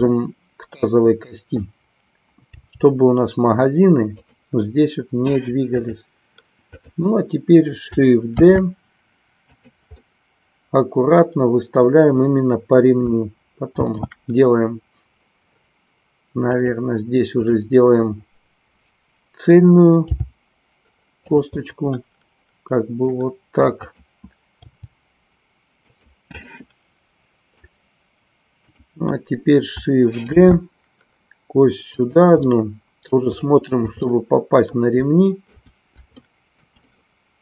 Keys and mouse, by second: 0.2-1.6 middle drag, 4.3 click, 5.8 click, 8.3 shift+d, 9.6 click, 10.0-11.9 middle drag, 13.8 shift+d, 16.7 click, 17.3 click, 21.7-23.3 middle drag, 23.8 click, 26.5-27.7 middle drag, 30.4 shift+d, 32.1 click, 32.5 middle click, 34.0-35.6 middle drag, 36.2 shift+middle click, 36.9-37.4 middle drag.